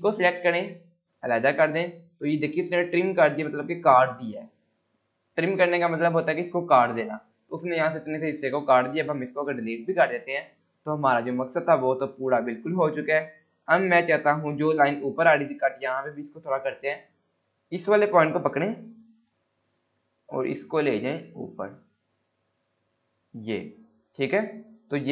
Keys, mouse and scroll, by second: 0.0 click, 9.7 Delete, 10.2 scroll down 1, 11.3-12.9 scroll up 1, 16.3 click, 19.2 scroll up 1, 20.2-23.4 drag, 23.7 scroll down 1, 24.3 click, 24.6-25.0 scroll up 1.